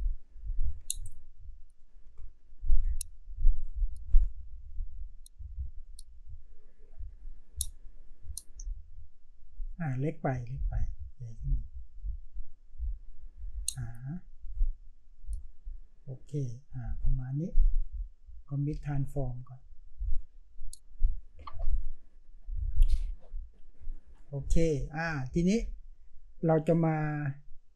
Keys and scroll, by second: 2.0 Return.